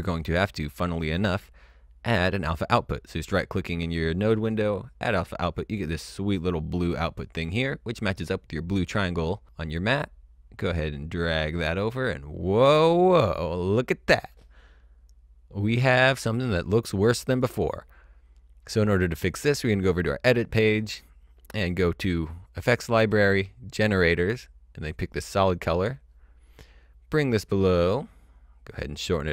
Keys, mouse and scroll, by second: 0.6 right click, 3.0 click, 6.2 click, 8.4 click, 17.3 click, 19.8 click, 22.7 click, 24.8 click.